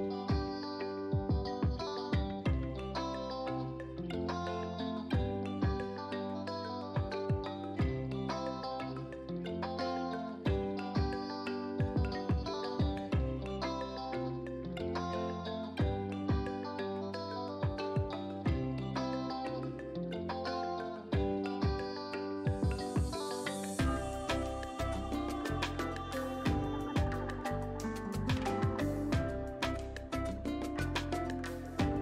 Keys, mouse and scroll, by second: 2.8 right click, 4.3 click, 9.1 click, 11.3 alt+click, 12.3-12.7 scroll down 1, 12.8 space, 12.9 click, 13.3 space, 13.6-14.2 scroll down 1, 14.2-32.0 drag.